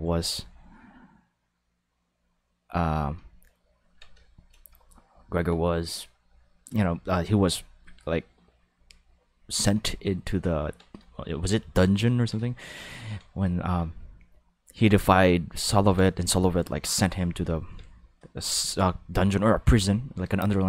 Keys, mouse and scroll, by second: 4.2 shift+middle click, 5.1 ctrl+middle click, 9.9 ctrl+middle click, 11.0 shift+middle click, 11.6 shift+middle click, 15.0 ctrl+middle click, 17.6 ctrl+middle click.